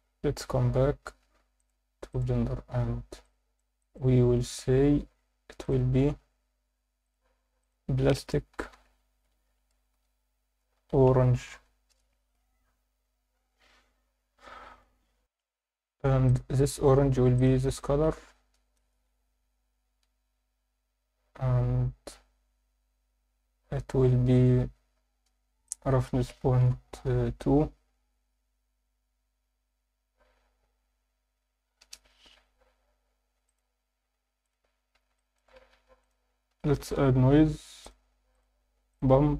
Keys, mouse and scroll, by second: 1.6-2.2 drag, 2.8 Tab, 3.2-3.6 alt+middle drag, 3.8 alt+shift+middle drag, 4.2 Tab, 4.8 Tab, 5.6 click, 7.0 click, 7.6-11.9 drag, 15.1 F9, 15.2 F10, 16.2 click, 25.6-31.8 drag, 25.6-26.9 scroll down 4, 33.4-34.6 drag, 35.1 alt+shift+middle click, 35.7 shift+a, 38.7 shift+a.